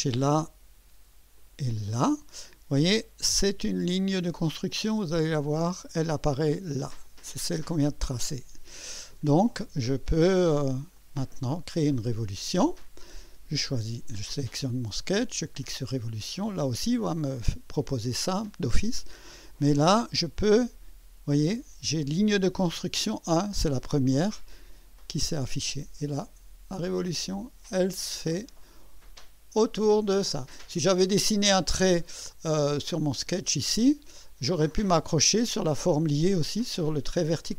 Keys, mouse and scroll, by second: 1.3 click, 4.7-5.6 drag, 7.0 click, 10.9-11.6 drag, 12.2 click, 16.2 click, 18.9 click, 24.9 click, 26.7 scroll up 2, 27.1 right click, 30.1 click, 32.8 click.